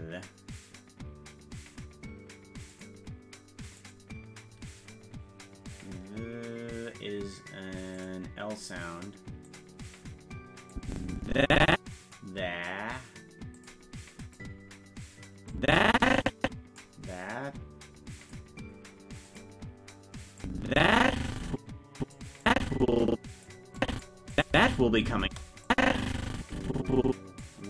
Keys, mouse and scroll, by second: 2.7 click, 3.7 click, 8.0 click, 9.4 click, 10.7-12.1 drag, 13.5 click, 14.2 click, 15.5-16.8 drag, 18.2 click, 19.2 click, 20.4-22.1 drag, 22.4-23.4 drag, 23.8 click, 24.3 click, 24.5 space, 25.6-27.4 drag, 25.6 space.